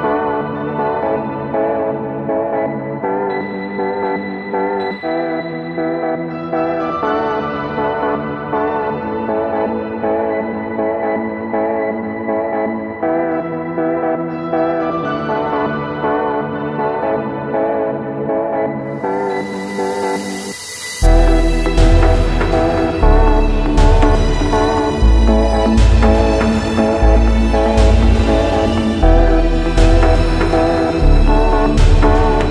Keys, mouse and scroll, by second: 0.0-1.2 scroll up 7, 1.8 click, 5.3 click, 7.0 right click, 8.3 click, 11.0 click, 12.4-14.1 drag, 14.5 shift+click, 16.1 shift+click, 17.8 click, 19.5 click, 20.2 click, 21.0 click, 24.0 click, 26.4 click, 26.6 ctrl+t, 28.4 click, 30.7 Return, 31.7 click, 32.3 Right.